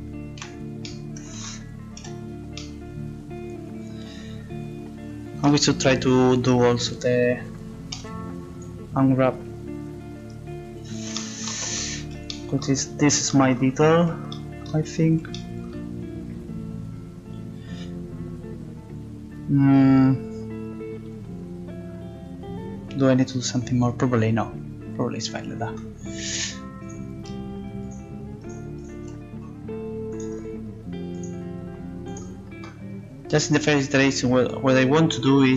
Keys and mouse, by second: 0.4 z, 2.0 a, 4.0 a, 6.9 a.